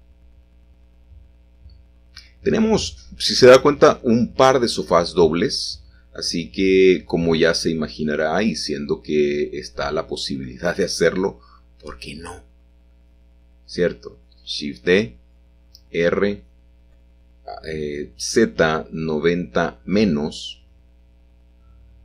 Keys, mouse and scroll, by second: 3.5 i, 4.7 i, 5.4 i, 6.6 i, 7.8 l, 9.3 i, 10.8 shift+d, 11.4 Escape, 12.5 r, 13.9 z, 14.2 9, 14.4 0, 14.8 Return, 16.0 ctrl+z, 16.8-21.4 typing.